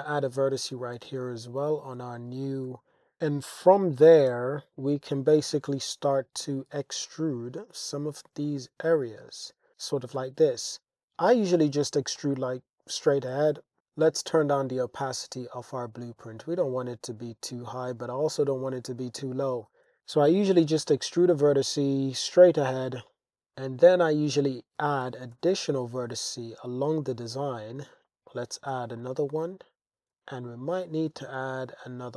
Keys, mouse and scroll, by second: 0.0 click, 1.0 g, 1.0 y, 2.5 click, 2.7 Tab, 3.2 g, 3.2 y, 4.0 click, 4.8 Tab, 5.7 Tab, 6.1 click, 7.3 click, 8.2 shift+click, 9.7 e, 10.2 y, 12.1 shift+scroll, 12.2 shift+click, 13.3 Tab, 14.0 click, 15.7 middle click, 17.8-19.1 middle drag, 19.2-19.9 middle drag, 19.9 Tab, 20.6 g, 20.9 y, 23.5 super+r, 23.5 middle click, 23.6 click, 24.1 click, 25.0 g, 25.3 z, 27.3 click, 27.7 super+r, 28.1 click, 28.7 g, 29.0 z, 30.1 super+r, 30.4 click, 31.4 g, 31.4 z.